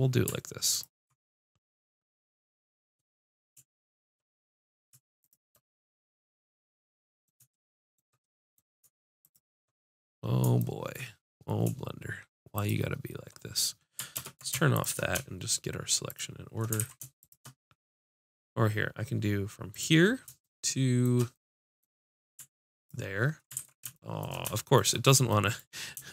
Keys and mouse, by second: 1.7-3.7 middle drag, 5.3-7.1 drag, 9.4-11.0 drag, 12.6 click, 14.2 ctrl+space, 16.8 ctrl+z, 20.2 middle click, 20.5-21.6 drag, 22.8-24.6 drag, 23.6 ctrl+z.